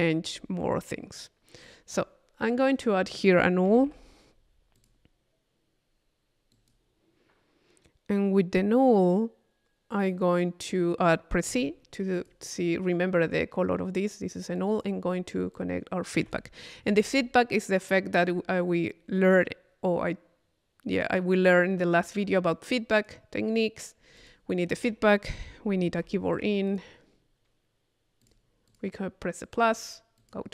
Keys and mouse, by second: 1.7 click, 2.6 right click, 2.7 click, 2.7 middle click, 2.9 click, 2.9 middle click, 3.4 click, 4.0 u, 4.8 click, 6.5 click, 7.9 click, 11.7 c, 12.1 click, 14.3 c, 14.6 click, 15.5-17.0 drag, 16.2 Tab, 18.2 click, 19.3 click, 22.7 click, 23.7 middle click, 24.2 click, 24.8 Tab, 26.7 click, 28.2 click, 28.7 click, 29.5 click, 30.2 click.